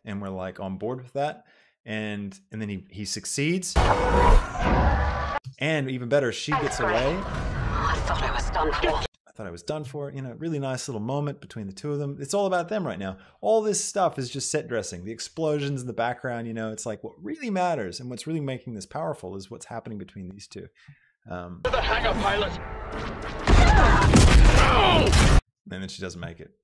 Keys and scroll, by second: 3.9 space, 6.5 space, 9.1 space, 21.9 space, 25.6 space.